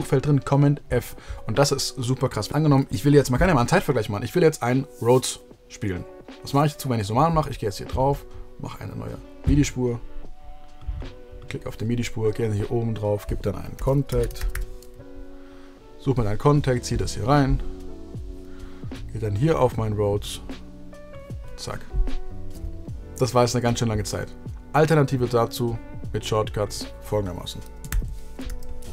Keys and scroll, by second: 13.5-15.0 typing, 27.8 shift+super+t.